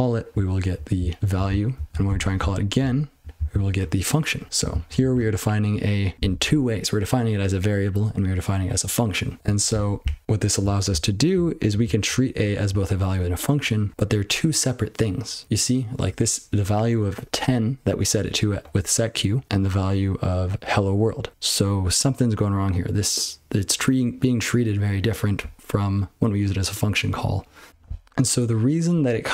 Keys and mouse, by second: 0.5 ctrl+p, 0.9-1.7 ctrl+n, 1.9 ctrl+p, 2.0 ctrl+c, 2.3-2.7 ctrl+n, 2.8-3.3 ctrl+p, 3.3 ctrl+n, 4.4 ctrl+p, 4.7 ctrl+n, 5.0 ctrl+n, 9.4 ctrl+c, 9.7-10.6 ctrl+n, 10.9-11.2 ctrl+n, 11.4 ctrl+n, 11.6 ctrl+p, 11.8 ctrl+p, 12.0 ctrl+p, 15.8 ctrl+p, 18.1 click, 18.2 click, 18.6 click, 18.7 click, 19.5 click, 19.6 click.